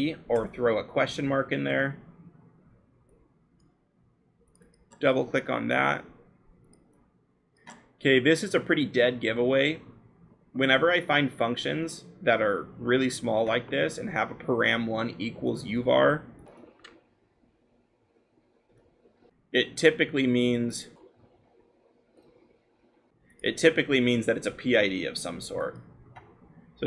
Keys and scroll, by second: 0.5 Return, 1.5-2.9 scroll.